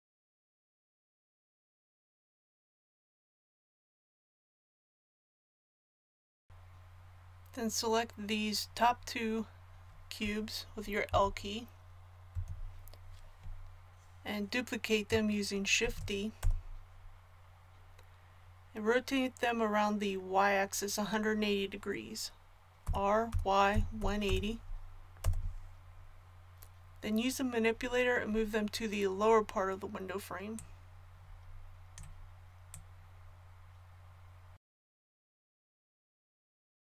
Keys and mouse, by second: 0.8 click, 0.9 a, 2.1 KP_1, 11.0 l, 12.3 l, 15.8 shift+d, 22.8 r, 30.5-34.5 drag, 34.8-35.9 drag, 35.9 middle click.